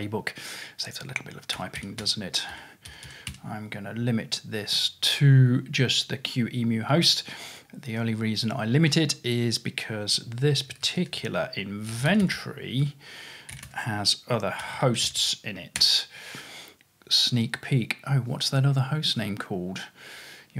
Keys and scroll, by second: 1.6-3.8 typing, 10.4 ctrl+w, 10.6 ctrl+w, 10.8 ctrl+w, 11.7-15.8 typing.